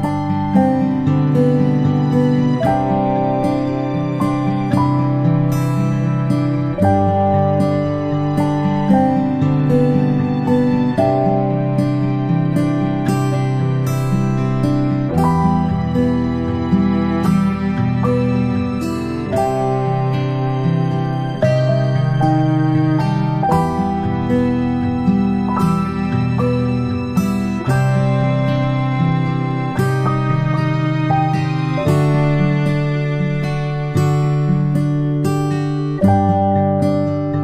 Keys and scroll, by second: 4.4-4.8 shift+space, 5.7 space, 6.0 space, 6.4 p, 8.4 m, 9.4 ctrl+z, 10.5-10.8 typing, 21.5 ctrl+alt+z, 22.0 Delete, 22.8 a, 23.8 p, 30.4 ctrl+z.